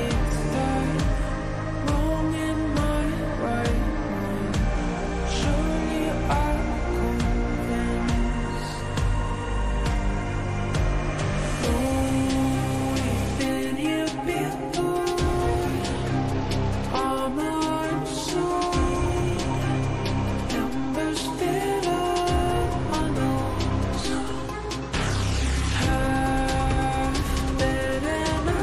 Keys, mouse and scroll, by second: 3.1 click, 7.5 click, 10.1 click, 12.1 right click, 13.3 click, 13.6 ctrl+space, 13.8 click, 16.4-21.8 drag, 23.3 click, 27.6 click.